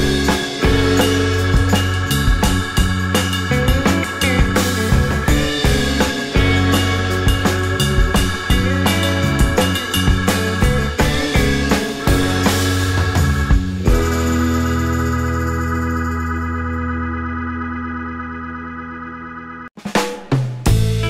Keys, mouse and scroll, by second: 0.7 typing, 2.1 typing, 7.2 typing, 10.1-11.0 typing, 11.0 alt+scroll, 11.0 alt+scroll down 1, 11.2 alt+click.